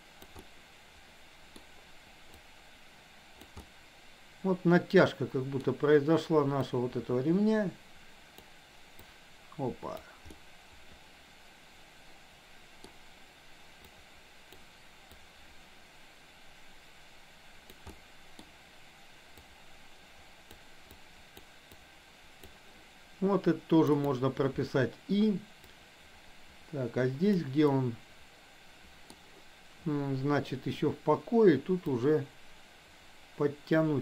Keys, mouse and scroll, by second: 0.4-1.6 middle drag, 2.4-3.4 drag, 3.7-5.7 middle drag, 6.7-8.6 drag, 9.1-10.2 drag, 10.4-12.9 middle drag, 13.9 click, 15.2-17.8 drag, 17.9 middle click, 19.4-20.6 drag, 20.9 click, 21.8 click, 24.1 click, 25.7-27.4 drag, 27.7-29.2 middle drag, 31.9-34.0 drag.